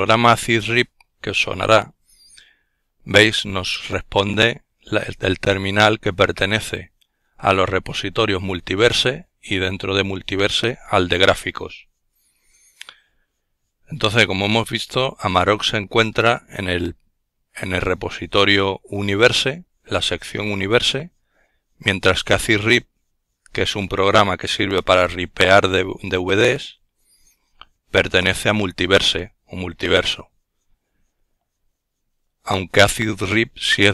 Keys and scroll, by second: 0.0 Return, 2.0 typing.